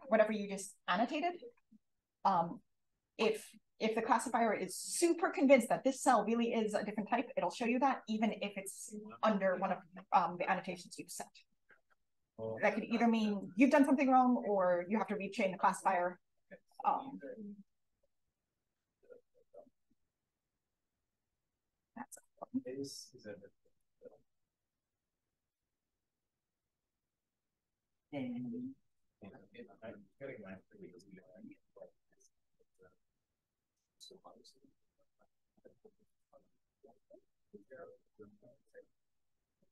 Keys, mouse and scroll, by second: 12.6-17.9 scroll up 1, 17.9 d, 19.0 d, 19.9 d, 22.0 click, 22.3 click, 22.6 d, 23.8 click, 25.4 d, 26.0 d, 26.9 d, 29.1 click, 29.4 d, 30.2 click, 31.3 d, 33.0 d, 33.9 d, 34.7 d, 35.8 d, 36.0 click, 37.2 d, 37.7-39.7 drag.